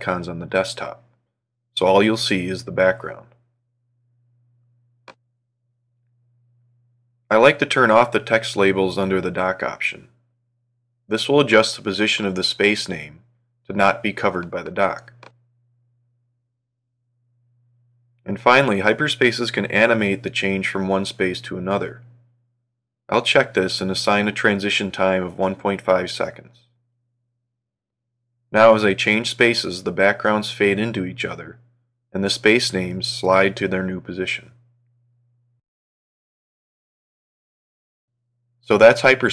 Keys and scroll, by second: 9.1 ctrl+3, 23.9 ctrl+4, 28.7 ctrl+1, 31.3 ctrl+3, 33.1 ctrl+1, 35.0 ctrl+4, 37.9 ctrl+2.